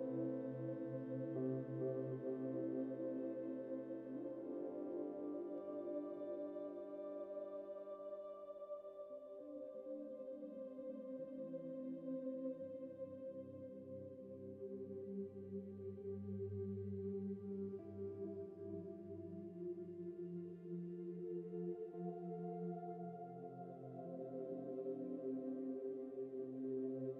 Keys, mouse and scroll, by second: 0.7 Tab, 1.6 KP_Decimal, 2.0 KP_Decimal, 10.7 scroll down 4, 11.8 scroll up 3, 12.0-14.5 middle drag, 21.4-22.4 shift+right drag, 22.3 click, 22.7-24.1 scroll down 7, 24.7-25.2 scroll up 4.